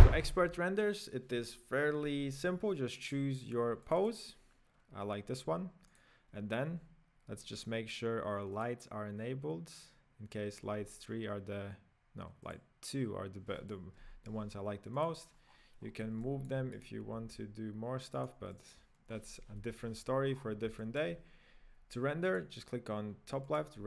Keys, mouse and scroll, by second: 0.2 right click, 3.0 click, 3.1 right click, 3.8 click, 4.2 click, 5.9 click, 6.6-8.7 scroll up 1, 8.7 click, 10.6-12.4 scroll down 3, 12.4 click, 13.6 click, 14.9 click, 15.4-16.2 scroll down 9, 16.2-16.9 middle drag, 16.9 right click, 17.2 g, 18.5-19.6 middle drag, 19.6 KP_1, 20.4-20.8 scroll up 6, 20.8-22.3 shift+middle drag, 22.3-23.8 drag.